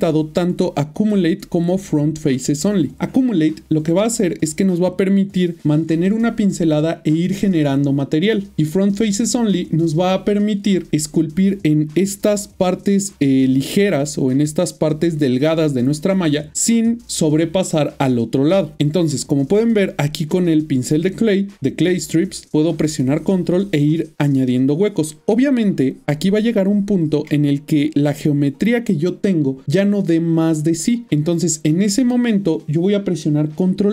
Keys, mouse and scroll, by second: 1.9 click, 11.9 middle click, 17.5 middle click, 18.9 middle click, 19.1 ctrl+middle click, 20.6 shift+middle click, 22.4 ctrl+click, 27.4 middle click, 29.6 middle click, 33.8 middle click.